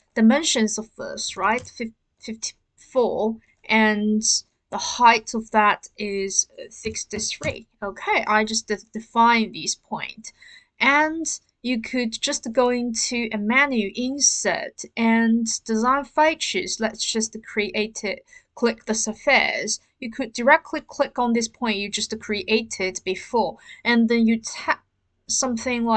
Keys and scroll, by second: 1.3 typing, 1.5 Return, 6.8-7.1 typing, 7.4 Return.